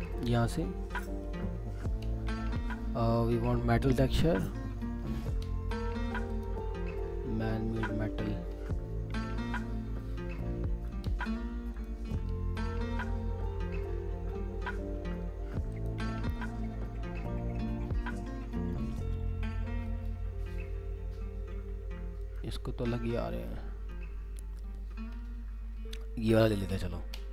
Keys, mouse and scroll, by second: 2.6 scroll down 1, 5.0 scroll up 1, 9.1 scroll down 1.